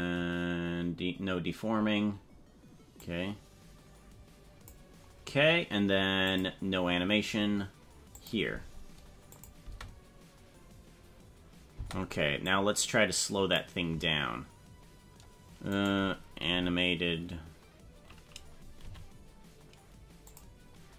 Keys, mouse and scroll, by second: 3.0-4.8 drag, 6.4 click, 8.2 click, 9.5 click, 9.6 space, 11.8 space, 12.5-13.7 drag, 15.7 right click, 16.5 h, 18.9 g.